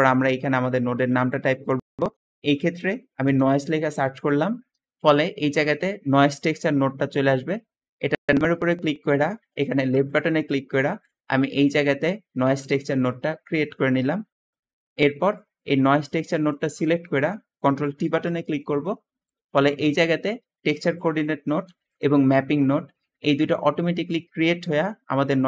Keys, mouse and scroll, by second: 2.1-3.9 typing, 10.7 `, 14.5 Escape, 15.5 g, 17.9 ctrl+t, 19.5 g, 23.7 `.